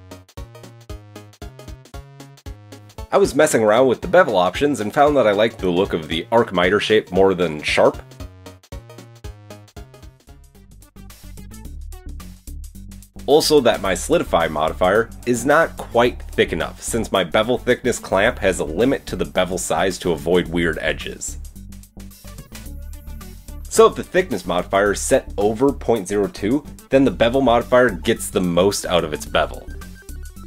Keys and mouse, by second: 0.0 click, 0.2 click, 1.3 Tab, 1.5 KP_1, 1.6 KP_3, 2.6 ctrl+shift+KP_1, 4.1-5.9 middle drag, 5.0 shift+Tab, 6.1-6.8 middle drag, 9.4 shift+middle click, 15.0 middle click, 15.2 Tab, 15.2-17.4 shift+middle drag, 16.5 Tab, 17.8-18.5 middle drag, 19.0 shift+middle drag, 20.0 click, 20.3-22.4 middle drag, 28.3 click, 28.3 middle click, 28.3 right click, 29.1 h, 29.3-29.9 drag, 29.7 middle drag, 29.7 right drag.